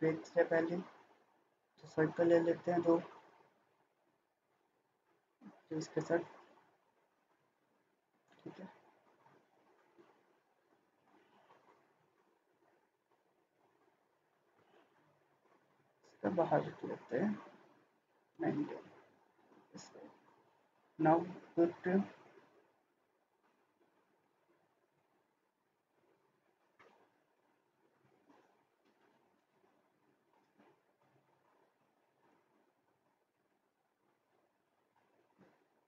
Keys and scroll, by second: 13.0 Escape, 17.8 typing, 18.3 Return, 19.1 Escape, 28.6 Escape.